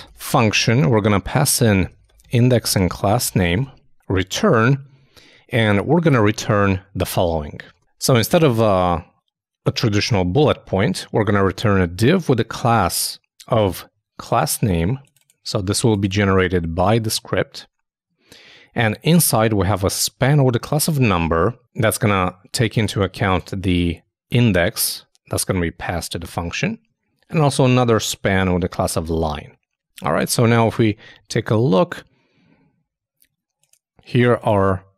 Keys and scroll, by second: 0.0-1.0 typing, 2.8-3.8 typing, 30.2 super+Tab.